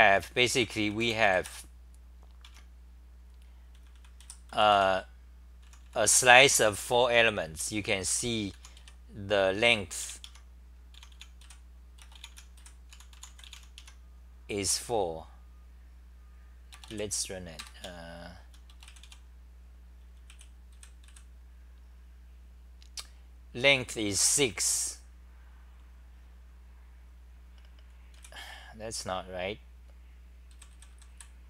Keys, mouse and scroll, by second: 0.0-1.5 typing, 3.5-5.2 typing, 6.6-9.0 typing, 10.7-13.6 typing, 13.8 Home, 17.8-18.6 t, 20.3 w, 20.7 d, 21.2 Delete, 28.1 w, 30.5 d.